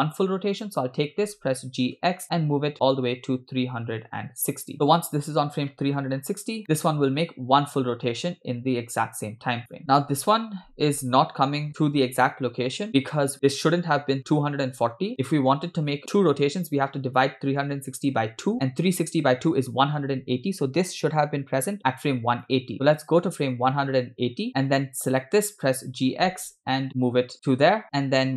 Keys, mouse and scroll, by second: 0.7 click, 1.7 g, 4.9 middle click, 4.9-5.4 scroll up 7, 5.4-6.3 scroll down 7, 6.6 middle click, 6.7 space, 22.5 click, 24.5 Right, 25.9 g, 27.3 middle click, 27.3 scroll up 7, 27.8-28.3 scroll down 10.